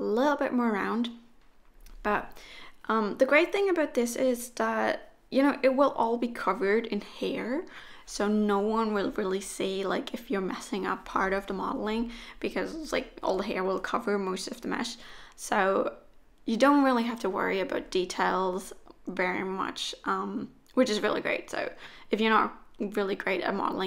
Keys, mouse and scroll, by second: 0.2 click, 0.5 middle click, 1.3 KP_1, 2.2 e, 3.9 s, 5.1 e, 7.9 s, 8.5 e, 11.0-11.7 scroll down 2, 11.8 e, 13.1 s, 14.5-14.9 scroll down 1, 15.0 middle click, 18.3 KP_1, 19.7 z, 20.9 click, 21.8 click, 22.4 click.